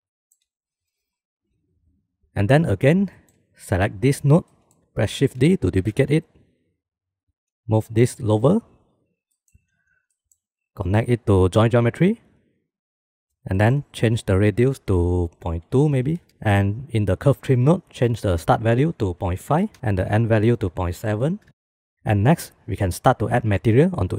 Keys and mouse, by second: 0.2 shift+drag, 3.8 click, 4.4-4.9 middle drag, 5.2 click, 6.4 shift+d, 8.1 click, 9.0 g, 10.1 middle click, 10.8 middle click, 11.9-13.0 drag, 14.3 middle click, 15.0-16.2 drag, 17.0 click, 18.6-21.9 drag, 21.9 ctrl+s.